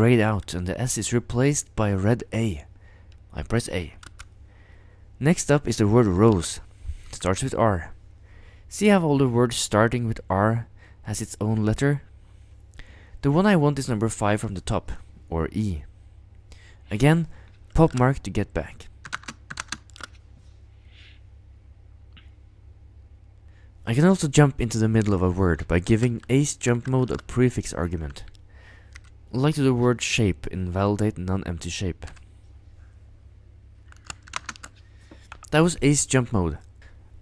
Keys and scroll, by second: 4.1 a, 6.1 ctrl+ø, 7.3 r, 14.5 e, 19.0 ctrl+u, 19.1 ctrl+space, 19.5 ctrl+u, 19.6 ctrl+space, 26.7 ctrl+u, 26.7 ctrl+0, 28.9 s, 32.1 j, 34.3 ctrl+u, 34.3 ctrl+space.